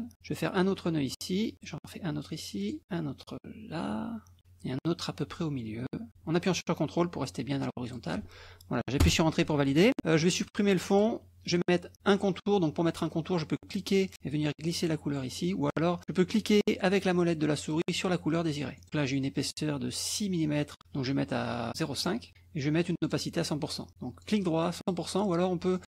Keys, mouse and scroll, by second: 0.1-2.7 scroll up 1, 2.7 click, 7.9 ctrl+click, 9.1 Return, 10.9 click, 13.7-15.4 drag, 16.9 middle click, 17.6 click, 18.8 click, 20.8-22.0 right drag, 22.0 click, 23.0 right click, 24.2 right click, 24.8 click, 25.8 click.